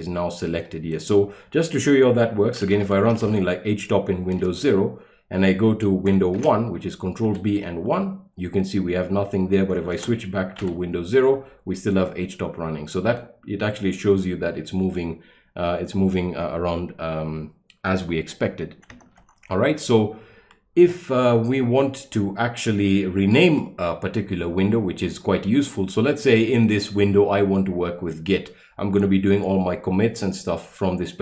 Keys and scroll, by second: 2.5-3.7 typing, 4.4 Return, 6.4 ctrl+b, 7.2 1, 9.9 ctrl+b, 10.6 0, 13.0 q, 19.1 ctrl+l.